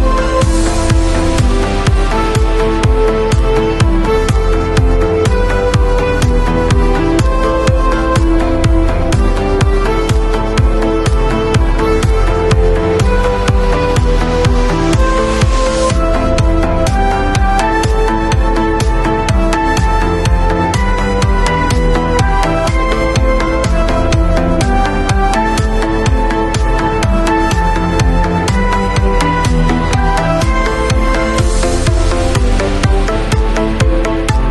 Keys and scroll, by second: 2.0 ], 3.7 [, 7.7 x, 10.2 x, 14.1 v, 18.5 super+a, 19.6 shift+super+c, 19.9 shift+super+v, 20.8 super+v, 21.5 shift+super+a.